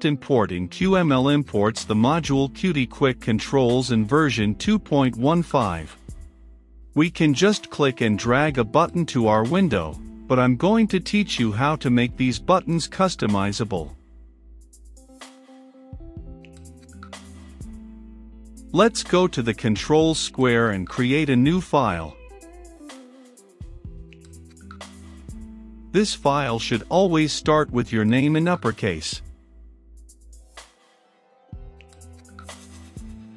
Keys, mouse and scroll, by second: 3.6-4.7 middle drag, 4.7-15.5 drag, 15.5 right click, 15.7 click, 16.3 q, 16.4 m, 16.5 l, 16.6 Return, 17.3 right click, 17.8 click, 18.2-18.7 typing, 18.9 Return, 19.5 right click, 20.5-25.4 drag, 25.6-27.6 typing, 28.9 click.